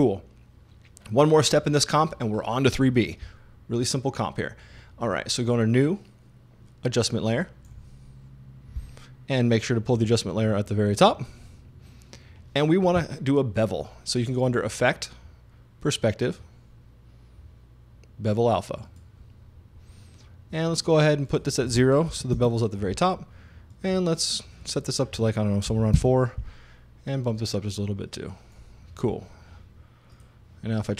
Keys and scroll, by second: 22.1 0, 22.3 Page_Up, 25.7 4, 26.0 Home.